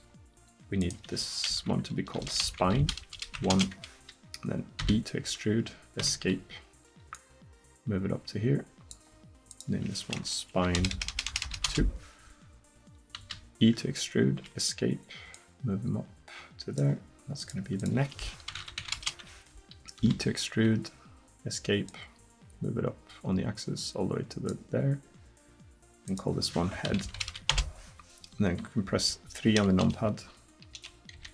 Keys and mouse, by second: 0.8-3.5 drag, 4.8 e, 7.2-9.1 drag, 9.5-11.5 drag, 11.0 BackSpace, 11.1 BackSpace, 11.5 BackSpace, 13.2 e, 15.4-17.2 drag, 20.0 e, 21.9-23.1 drag, 29.8 KP_2, 30.8 KP_2, 31.2 KP_3.